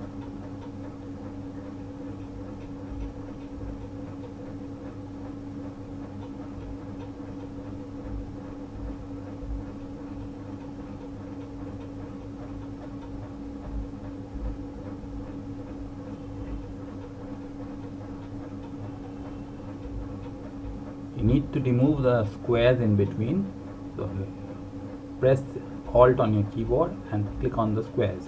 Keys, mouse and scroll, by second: 3.0 click, 14.1 click, 21.2 alt+Num_Lock, 21.5 alt+click, 22.7 alt+click, 24.7 alt+click, 26.6 alt+click, 27.4 alt+click.